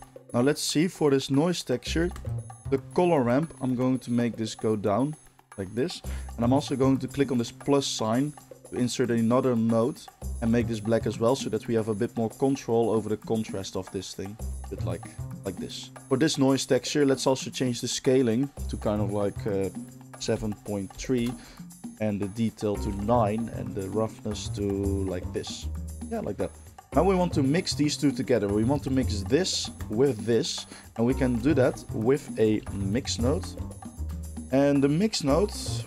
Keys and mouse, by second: 2.1 ctrl+shift+click, 2.3-4.5 ctrl+shift+middle drag, 4.5-9.7 drag, 9.7-11.4 middle drag, 11.4-23.1 drag, 23.1-23.9 middle drag, 23.9-29.0 drag, 29.0-29.8 ctrl+shift+middle drag, 29.8 ctrl+shift+click, 29.9-35.8 ctrl+shift+middle drag, 31.5 shift+a, 33.3 BackSpace.